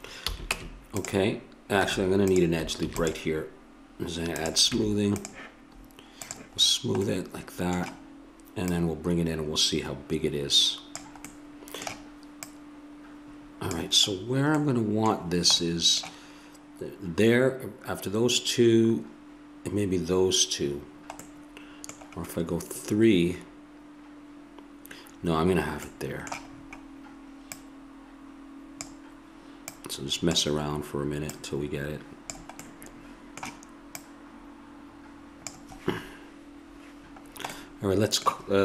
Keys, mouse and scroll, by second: 0.3 a, 0.5 Tab, 1.8 Tab, 2.9 ctrl+r, 4.7 Tab, 6.2 click, 7.5 middle click, 8.7-10.7 drag, 11.5 middle click, 12.4-14.1 drag, 14.1-18.4 middle drag, 21.2-23.4 middle drag, 25.9 middle click, 27.5-32.8 drag, 32.8 middle click, 34.0-37.2 drag, 37.2 middle click.